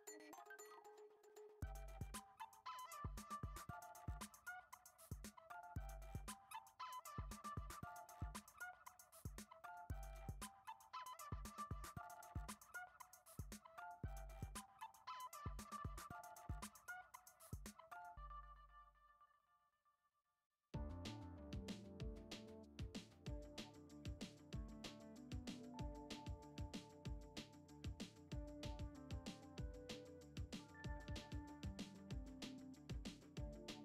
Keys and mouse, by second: 0.1 click, 0.5 alt+shift+click, 0.7 alt+shift+click, 1.5 g, 3.4 click, 4.0 alt+shift+click, 4.2 alt+shift+drag, 4.9 g, 7.7 ctrl+Tab, 8.3 right click, 9.3-10.1 drag, 10.0 ctrl+Tab, 10.6 click, 12.0 click, 13.8 click, 14.7 Tab, 15.2 KP_1, 15.9 shift+middle click, 16.3 a, 16.8 shift+middle click, 17.8 shift+d, 20.7 r, 22.9 shift+d, 23.8 r, 25.3 drag, 26.9 click, 28.0 click, 28.6-32.8 typing.